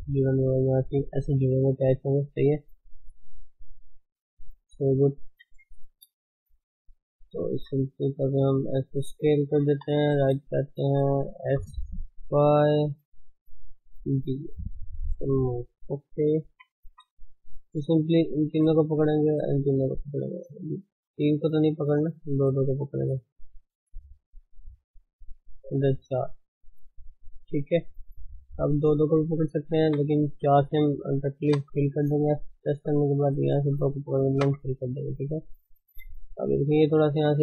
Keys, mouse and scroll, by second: 1.3-3.3 drag, 3.3 d, 3.5-4.6 right drag, 4.6 d, 4.7 right click, 5.5 KP_1, 6.0-6.4 scroll up 1, 6.4 shift+middle click, 6.8 scroll up 1, 7.3 scroll down 2, 7.7 shift+middle click, 8.0 s, 9.7 KP_3, 11.5 s, 13.6 g, 16.5 KP_1, 17.0-17.5 scroll up 3, 17.5 shift+z, 18.5 click, 19.8 scroll down 2, 19.9 middle click, 20.8 shift+z, 21.0 middle click, 22.0-23.3 middle drag, 22.5 scroll up 1, 23.3 click, 31.6 f, 32.6 click, 34.5 f, 35.0-37.2 middle drag, 37.2-37.4 scroll up 2.